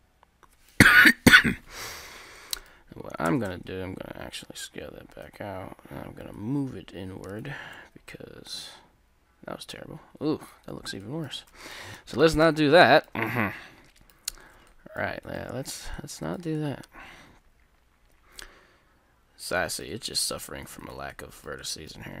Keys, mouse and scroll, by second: 1.8 Tab, 1.9 middle click, 2.4 middle click, 3.2 s, 7.7 Tab, 7.7 click, 8.3-10.1 middle drag, 10.7 Tab, 11.0 middle click, 11.6 ctrl+z, 11.7 ctrl+z, 11.9 ctrl+z, 12.4 ctrl+z, 13.2 Tab, 14.5 Tab, 17.0-18.8 middle drag, 20.3 ctrl+r, 20.7 ctrl+r, 21.2-22.2 middle drag.